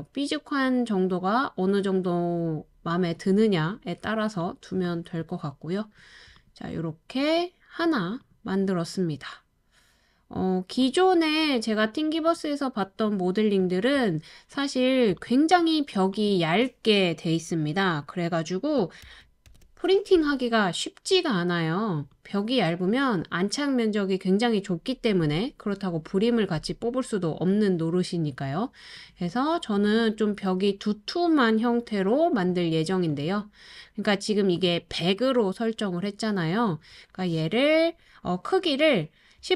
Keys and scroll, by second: 6.2-7.4 typing, 19.0 super+c, 19.4 super+v.